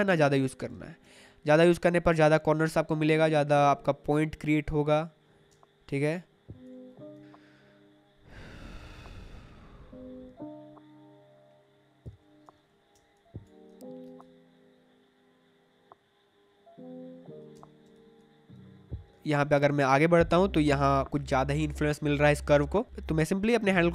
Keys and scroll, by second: 0.7 space, 5.5 space, 12.4 space, 17.5 space.